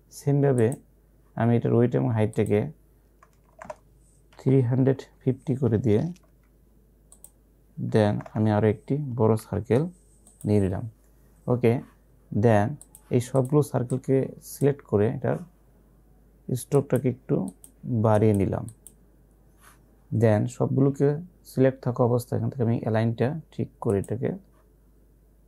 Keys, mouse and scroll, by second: 3.4 BackSpace, 6.3 Tab, 7.2 click, 8.0 BackSpace, 10.4 click, 12.9-16.8 drag, 24.0 click.